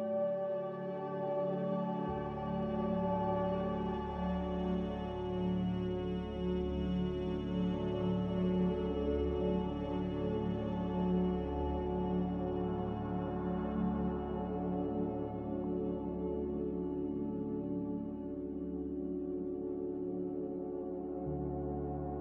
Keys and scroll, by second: 4.6-6.2 typing, 11.9-12.6 typing, 13.6 Delete, 14.1 b, 14.7 x, 15.7 n, 21.2 a.